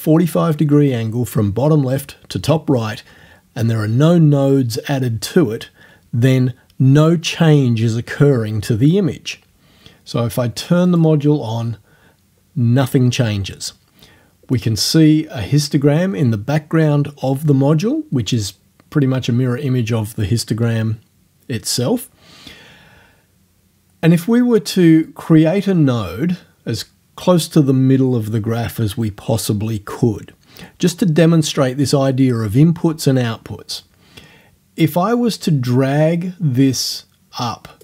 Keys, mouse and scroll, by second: 10.9 click, 25.1-27.0 drag, 34.9-37.8 drag.